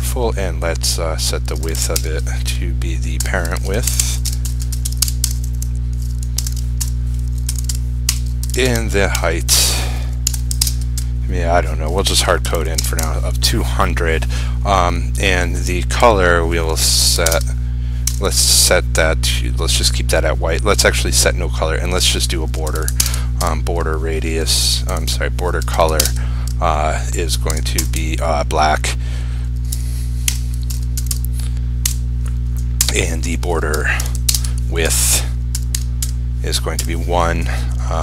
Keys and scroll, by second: 10.8 ctrl+space, 17.4 ctrl+space, 23.1 ctrl+space, 26.1 ctrl+space, 34.4 ctrl+space.